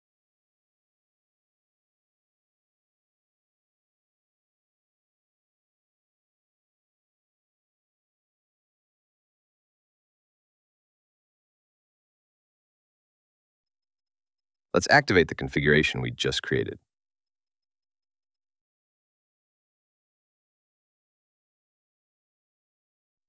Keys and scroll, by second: 6.7 ctrl+x, 14.7 super+v, 22.6 super+v.